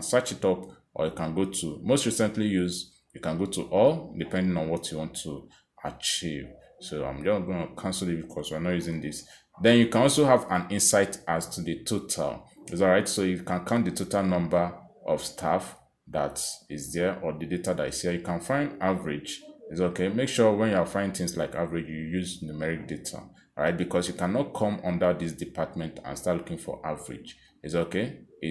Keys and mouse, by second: 0.7 click, 2.0 click, 3.2 click, 4.1 click, 5.5 click, 7.7 click, 9.2 click, 10.0 click, 12.4 click, 13.9 click, 28.0 click, 28.4 click.